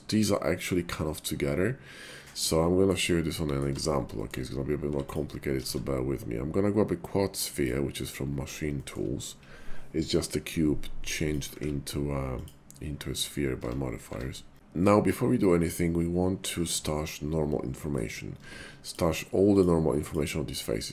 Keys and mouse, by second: 2.6 shift+middle click, 3.4 middle click, 3.7 Tab, 4.1 shift+click, 4.8 x, 5.6 shift+a, 8.8 shift+click, 11.2 click, 11.6 ctrl+`, 13.6 Tab, 14.1 Tab, 14.5 Tab, 14.5-17.9 middle drag, 18.3 Tab, 19.4 click.